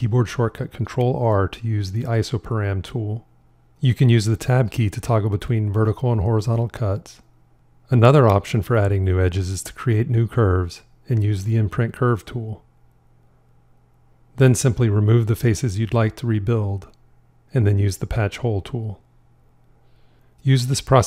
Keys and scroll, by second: 11.4 shift+i, 15.6 shift+x.